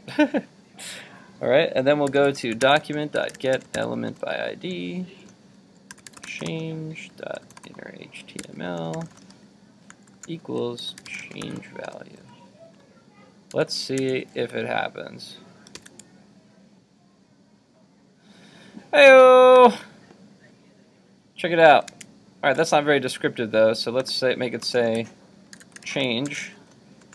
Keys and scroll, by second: 13.5 super+s, 14.1 super+Tab, 15.8 super+r, 21.9 super+Tab.